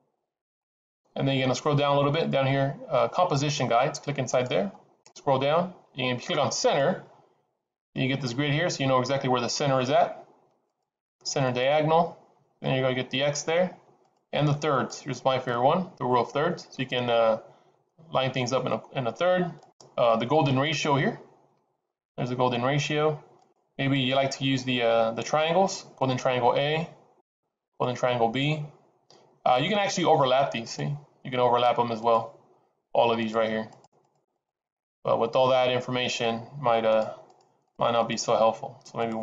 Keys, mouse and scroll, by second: 0.9-1.8 scroll down 2, 4.3 click, 4.9-5.3 scroll down 3, 6.5 click, 10.6 click, 11.4 click, 14.0 click, 15.6 click, 19.6 click, 20.4 click, 24.2 click, 26.2 click, 27.1 click, 27.6 click, 30.0 click, 30.6 click, 31.9 click, 33.1 click, 33.6 click, 34.0 click, 34.3 click, 36.8 click, 37.2 click, 37.6 click, 38.0 click, 38.9 click.